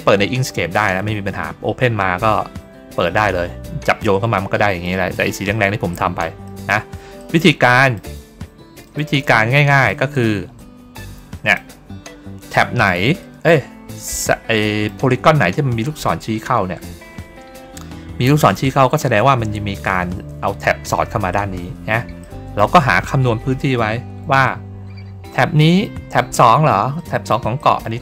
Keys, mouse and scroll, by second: 4.7 middle click, 5.8 middle click, 6.3 middle click, 7.1 middle click, 7.6 middle click, 8.7 click, 9.7 shift+click, 10.5 click, 12.7 click, 13.1 middle click, 13.6 ctrl+scroll up 1, 14.5 middle click, 15.3 ctrl+scroll down 1, 22.1 middle click, 23.1 ctrl+scroll down 1, 24.9 ctrl+scroll up 1, 25.7 middle click, 26.9 middle click, 27.5 middle click.